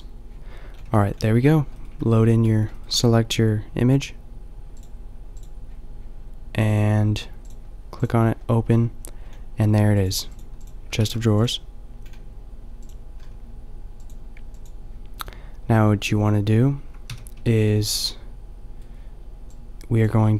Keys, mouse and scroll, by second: 0.9 a, 2.0 a, 11.4 shift+s, 17.2 n.